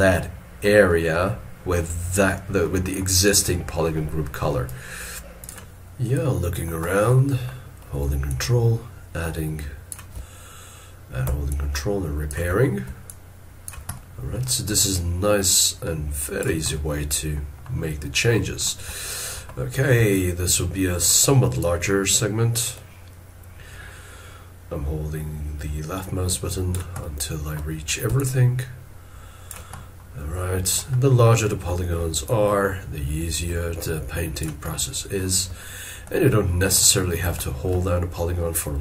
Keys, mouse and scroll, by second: 4.5 scroll up 1, 4.7 ctrl+click, 6.8 scroll down 1, 8.3 ctrl+click, 11.5 ctrl+click, 13.1 ctrl+click, 13.9 middle click, 14.9 ctrl+click, 16.7 middle click, 17.9 scroll down 1, 18.9 shift+middle click, 20.1 ctrl+click, 27.0 middle click, 28.2 ctrl+click, 29.9 scroll down 1, 32.2 ctrl+click, 34.7 middle click, 36.4 shift+middle click.